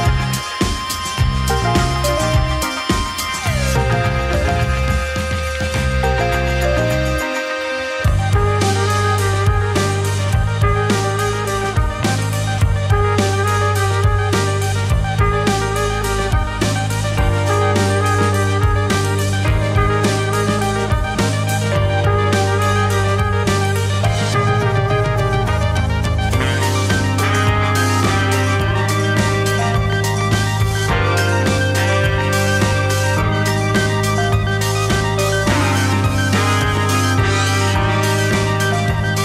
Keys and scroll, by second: 11.5 z, 29.7 ctrl+b, 36.4 ctrl+[.